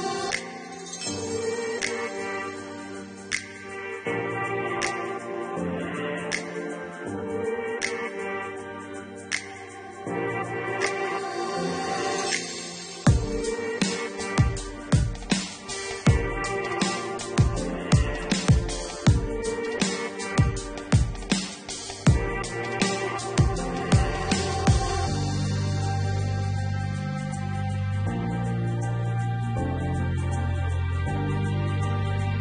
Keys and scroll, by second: 17.2 4.